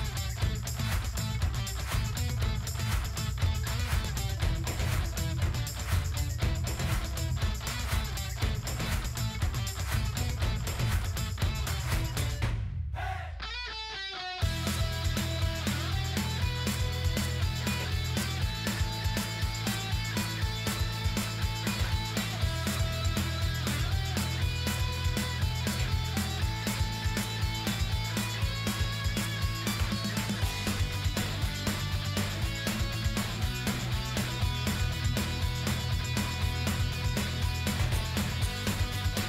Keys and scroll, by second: 26.4 ctrl+g.